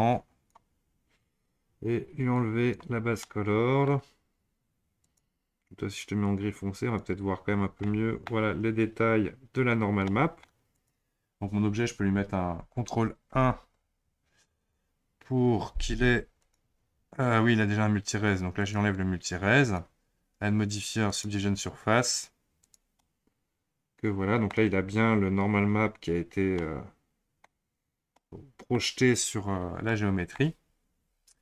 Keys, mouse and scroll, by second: 2.3 click, 3.2-5.0 middle drag, 5.0 click, 7.4-7.8 scroll up 3, 7.8-9.7 middle drag, 9.7-10.0 scroll down 2, 10.0-10.7 middle drag, 10.7 click, 13.3 ctrl+1, 14.5 click, 16.4 click, 18.6-22.7 drag, 23.0-26.0 middle drag, 26.6-28.8 middle drag, 28.8-29.5 scroll down 1, 29.5-29.9 scroll up 2, 29.9-31.4 middle drag.